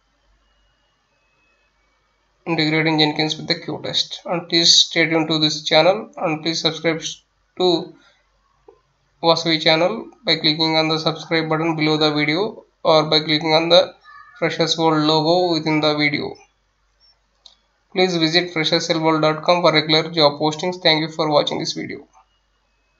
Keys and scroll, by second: 0.0-2.4 typing, 7.6 Delete.